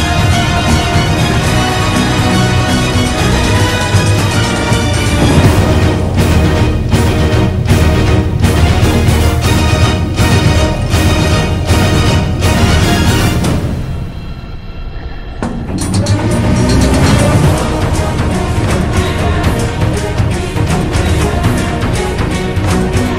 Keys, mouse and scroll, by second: 0.2 ctrl+z, 0.7 ctrl+z, 1.3 ctrl+z, 2.6 ctrl+z, 6.8 ctrl+-, 7.6 ctrl+=, 9.2 ctrl+z, 9.5 ctrl+-, 10.0 ctrl+=, 13.4 ctrl+-, 13.5 ctrl+=, 16.2 f, 16.9 b, 17.8 ctrl+-, 18.7 ctrl+=, 20.7 ctrl+z.